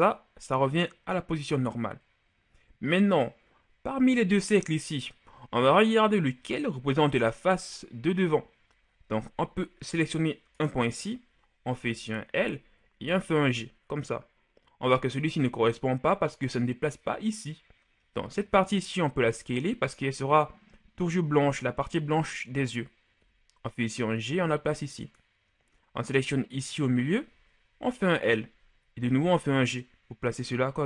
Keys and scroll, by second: 11.8 l, 12.9 g, 19.1 s, 23.1 g, 27.8 l, 28.9 g.